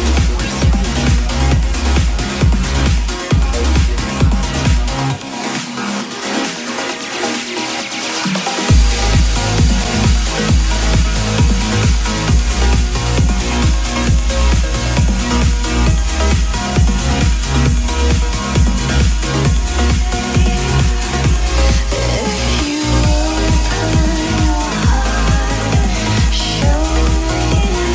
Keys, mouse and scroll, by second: 10.2 p, 11.3 click, 13.0 KP_2, 13.2 KP_0, 14.5 KP_0, 16.3 KP_0, 17.3 click, 18.8 KP_1, 19.0 KP_0, 19.7 KP_0, 23.6-27.9 drag.